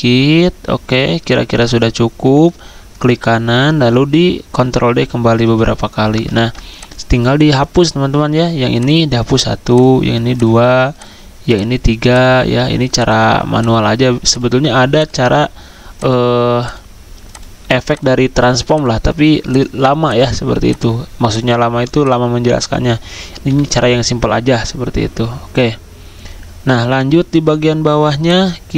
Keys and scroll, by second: 4.6 ctrl+d, 4.9 ctrl+d, 5.1 ctrl+d, 5.4 ctrl+d, 6.4 ctrl+d, 23.5 Delete, 23.5 End.